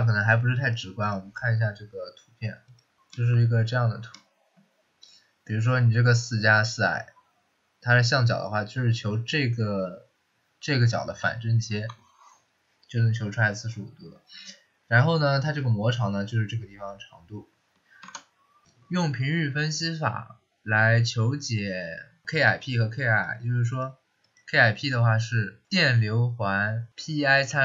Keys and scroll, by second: 18.0 alt+Tab.